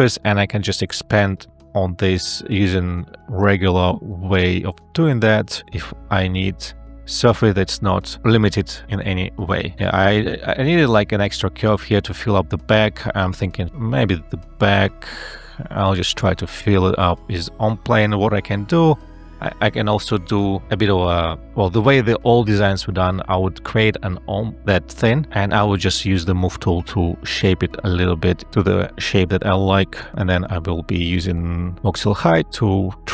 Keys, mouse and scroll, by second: 0.1 ctrl+z, 0.8 [, 3.8 e, 17.1 e, 17.5 space, 20.7 ctrl+z, 21.5 space, 23.4 m, 31.0 ctrl+a, 31.4 e.